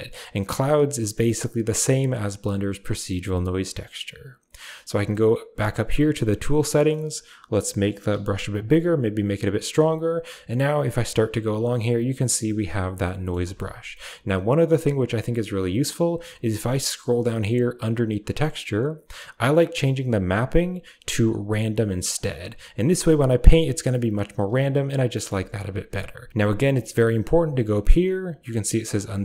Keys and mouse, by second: 5.1 click, 6.9 middle click, 8.1 f, 9.1 click, 9.7 f, 10.6-12.7 drag, 13.0 middle click, 13.4 ctrl+z, 19.6-22.1 drag, 23.0-24.5 drag, 25.1 middle click, 25.3 ctrl+z, 25.9 click.